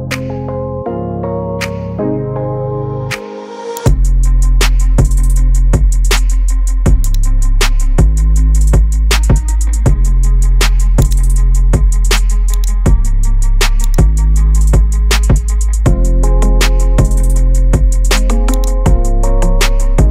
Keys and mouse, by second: 3.0 space, 3.5 Delete, 3.8 click, 5.0 Delete, 6.4 alt+r, 7.7-8.2 shift+drag, 11.0 click, 12.6 click, 13.9 click, 16.4 shift+drag, 18.6-20.1 drag.